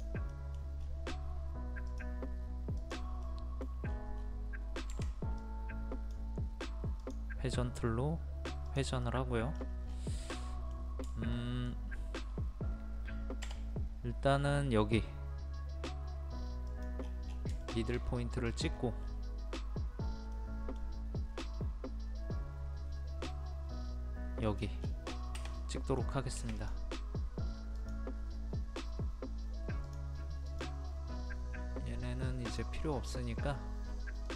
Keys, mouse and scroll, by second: 0.3 middle click, 0.8-1.8 scroll up 1, 1.8 click, 3.2 middle click, 3.8-4.9 scroll up 1, 4.9-5.4 scroll up 1, 5.4-6.5 drag, 9.0 middle click, 9.5 scroll down 1, 10.3 middle click, 11.9-12.3 scroll up 1, 13.4 m, 16.6 click, 17.0 scroll down 1, 17.3 scroll up 1, 17.6 shift+middle click, 18.7 scroll up 1, 20.3 middle click, 24.4 click, 24.8 scroll down 1, 25.5 middle click, 26.5-33.5 drag.